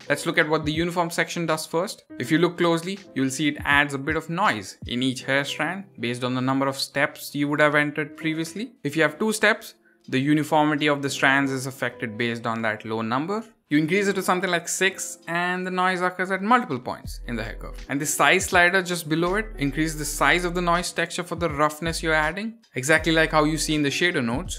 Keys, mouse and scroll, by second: 0.0 shift+middle click, 0.0-0.3 scroll down 2, 0.5-8.8 drag, 8.8-9.1 scroll up 8, 9.3 click, 11.2-12.1 scroll down 6, 12.1-14.6 drag, 14.6-15.1 scroll up 4, 15.2 scroll down 7, 15.5-16.9 drag, 17.8 scroll down 4, 18.5-22.6 drag.